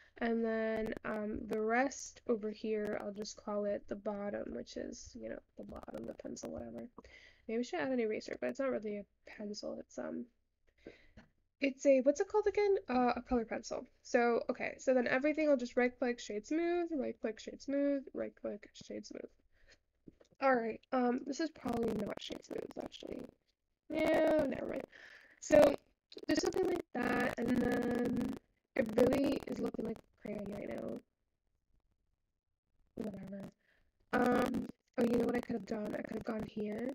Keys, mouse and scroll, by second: 1.0-1.4 scroll down 3, 1.4 Tab, 1.8 click, 3.1 click, 3.3-4.6 drag, 4.6 t, 6.1-6.6 scroll down 11, 6.6-7.0 shift+scroll up 1, 7.0 shift+middle click, 7.2-8.6 scroll up 4, 8.6 shift+scroll up 2, 8.7-9.8 shift+middle drag, 9.8-12.3 scroll up 4, 13.1 alt+z, 15.3 right click, 16.4 click, 17.2-20.3 right drag, 20.3 click, 21.1 click, 22.2-27.0 right drag, 27.0-28.4 shift+middle drag, 28.4-28.9 scroll down 8, 28.9-31.0 shift+middle drag, 31.0-31.6 scroll up 3, 31.6-32.6 scroll down 3, 33.7 click, 34.4-35.1 scroll up 4, 35.1-36.5 shift+middle drag, 36.5 Tab.